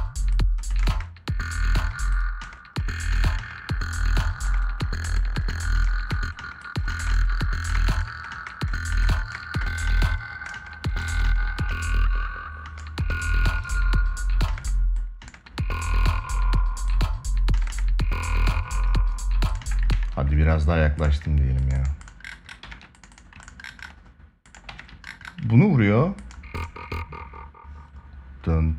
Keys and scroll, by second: 0.4 space, 8.0 space, 14.2 space, 17.3 space, 19.3 space, 19.6 ctrl+s, 22.3 ctrl+s, 24.4 ctrl+s.